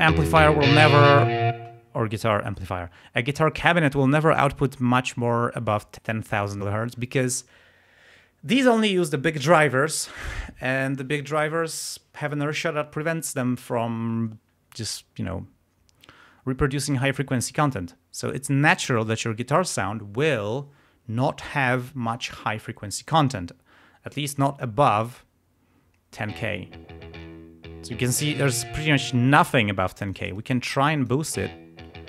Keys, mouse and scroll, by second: 1.5 space, 26.3 space, 29.3 space, 30.0-31.3 drag, 31.3 space, 31.8 scroll down 2.